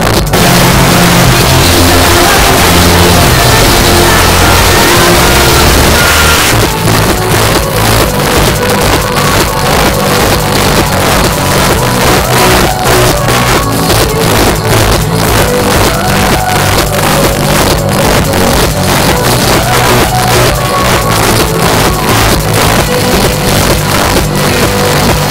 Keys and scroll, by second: 6.4 Page_Down.